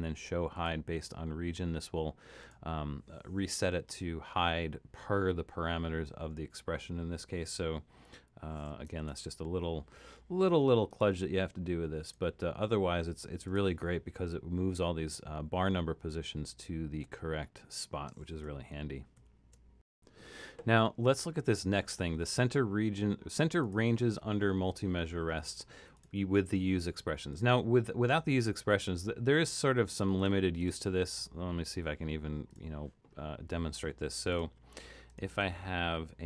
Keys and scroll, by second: 9.0 super+d, 18.5 super+-, 18.7 super+-.